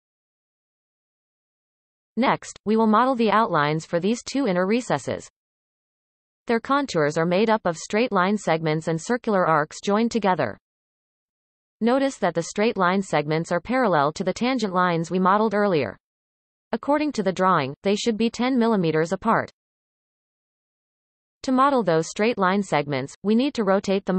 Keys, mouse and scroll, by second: 22.5-23.4 scroll up 1, 23.4 shift+middle click.